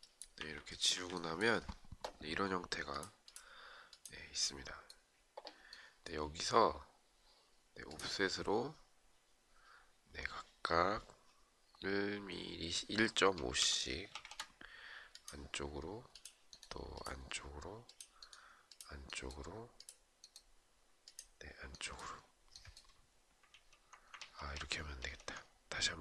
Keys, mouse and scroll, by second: 13.7 Return.